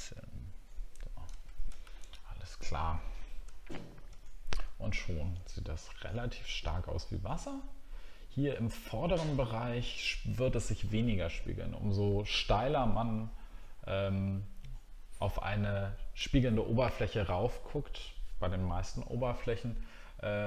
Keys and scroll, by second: 1.8 alt+scroll down 1.